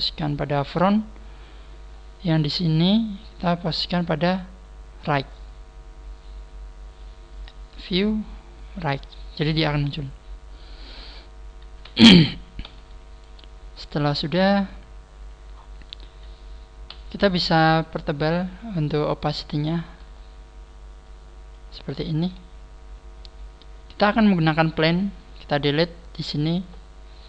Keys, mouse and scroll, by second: 1.9-2.2 scroll down 7, 3.5 click, 7.3 click, 8.7 click, 9.5 scroll down 1, 11.2 scroll down 1, 12.7 n, 14.1 click, 14.9-15.7 scroll up 4, 15.7 scroll down 1, 16.9 n, 19.0 click, 20.0 n, 21.1 click, 21.8 n, 22.8-23.2 scroll up 2, 23.3 scroll down 1, 24.2 scroll down 1, 25.2 scroll up 1.